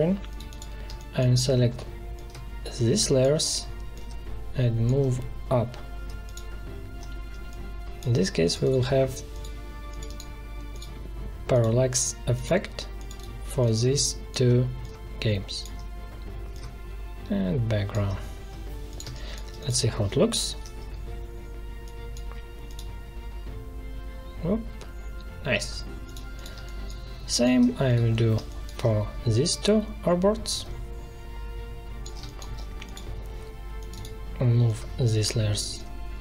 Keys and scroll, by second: 18.9 space, 20.4 ctrl+Return, 26.5 space, 32.1 space.